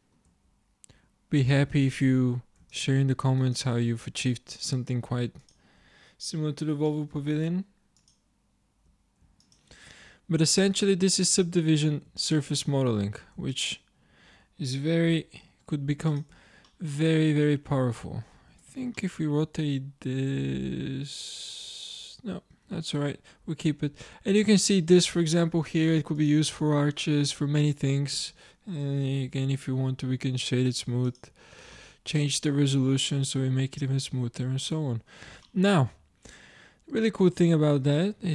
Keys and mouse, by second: 0.4 Tab, 3.6-5.8 drag, 6.9 middle click, 8.5-11.3 drag, 11.3 z, 11.8 z, 12.6-15.1 drag, 13.1 z, 15.1 s, 16.3 z, 18.6 Tab, 22.9-25.3 middle drag, 26.7-27.9 drag, 28.2 space, 31.1-32.1 drag, 32.1-33.7 middle drag, 34.4-35.6 middle drag.